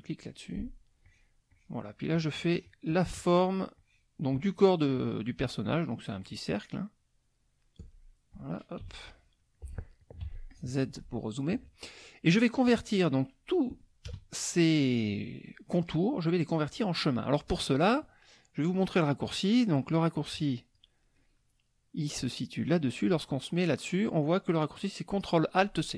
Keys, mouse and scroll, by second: 1.0 shift+click, 1.5 shift+click, 2.1 shift+click, 2.5 shift+click, 3.4 shift+click, 3.7 shift+click, 4.3 shift+click, 5.0 shift+click, 6.2 shift+click, 6.8-7.9 shift+drag, 8.8 KP_5, 9.4 KP_5, 9.4 click, 10.2 z, 10.5 click, 14.0 KP_Add, 14.8 click, 20.3 click.